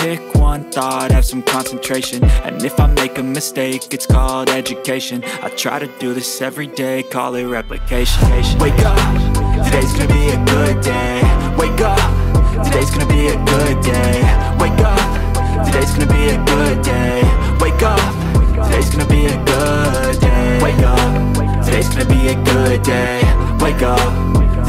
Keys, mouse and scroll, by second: 7.2 space, 7.4 alt+click, 8.1 alt+click, 8.3 alt+double click, 9.0 ctrl+click, 15.9 space, 16.7 alt+click, 19.0 alt+click, 21.2 alt+space, 21.4 alt+click, 21.4 alt+double click, 21.7 alt+space, 23.4 space, 24.4 space.